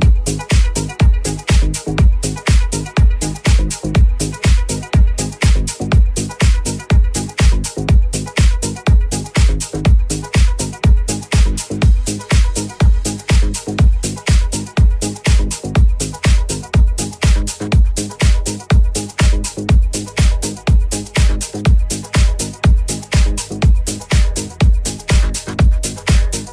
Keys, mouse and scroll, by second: 0.0 ctrl+r, 1.2 click, 1.2 3, 1.6 right click, 1.8 right click, 2.0 right click, 2.5-6.1 typing, 5.1 right click, 5.1 shift+middle click, 5.6 shift+right click, 5.6-6.8 shift+middle drag, 6.8 right click, 6.9 shift+middle click, 7.4 right click, 7.5-8.5 middle drag, 7.7 j, 8.2 3, 8.5 right click, 8.6 shift+middle click, 8.7 shift+right click, 8.8 shift+middle click, 8.9 shift+right click, 9.0 shift+middle click, 9.1 shift+right click, 9.2 shift+middle click, 9.3 shift+right click, 9.4 shift+middle click, 9.5 shift+right click, 9.6 middle click, 9.7 right click, 9.8 middle click, 9.9 right click, 10.0 shift+middle click, 10.4 shift+right click, 10.4-11.7 shift+middle drag, 11.7 shift+right click, 11.7 shift+middle click, 12.1 middle click, 12.4 shift+right click, 12.5 shift+middle click, 12.9 shift+right click, 13.0-26.5 shift+middle drag, 13.9 alt+e, 16.1 i, 17.7 ctrl+r, 18.9 ctrl+z, 20.6 ctrl+r, 22.3 ctrl+r, 24.8 Tab, 26.3 /.